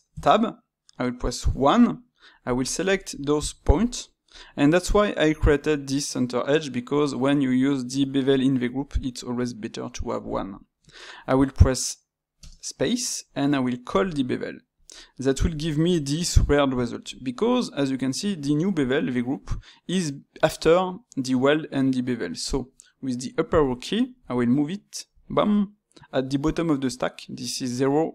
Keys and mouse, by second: 1.4 1, 2.4 click, 3.1 shift+click.